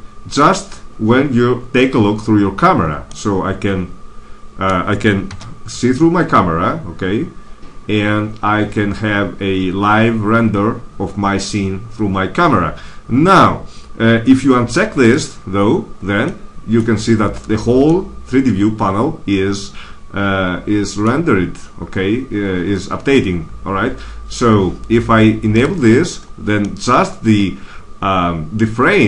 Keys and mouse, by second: 3.6-4.6 middle drag, 5.2 KP_0, 15.0-16.6 drag, 16.6-19.6 middle drag, 25.4-26.6 drag, 26.6-28.4 middle drag.